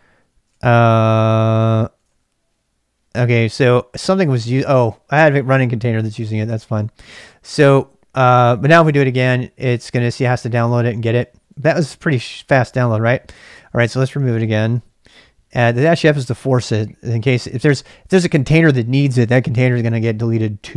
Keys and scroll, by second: 0.5-2.5 typing, 3.4 ctrl+[, 3.5 k, 3.9 k, 4.2 alt+f, 7.2 k, 8.8 Return, 9.8 alt+space, 11.2-12.5 typing, 13.6 ctrl+[, 13.7 k, 13.8 k, 14.4 Return.